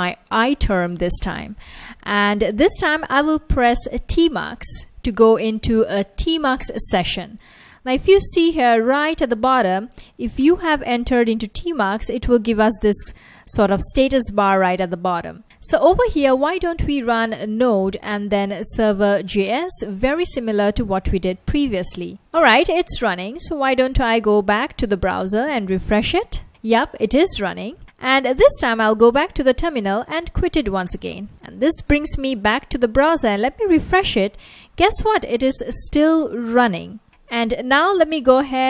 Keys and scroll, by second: 1.9-3.7 typing, 4.6 Return, 10.1 F1, 12.0 F1, 12.6 F1, 13.6 F1, 16.8-18.9 typing, 21.6 Return, 23.2 super+Tab, 25.6 super+r, 27.5 super+Tab, 31.0 super+w, 33.1 super+r, 34.5 super+r, 37.7 alt+space, 37.9-38.6 typing.